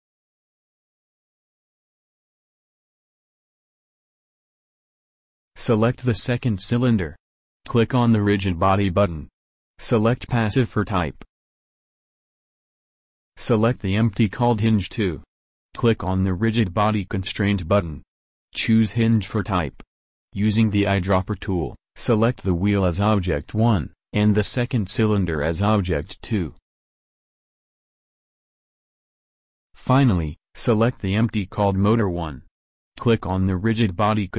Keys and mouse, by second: 24.8-26.0 drag, 28.6-33.2 drag.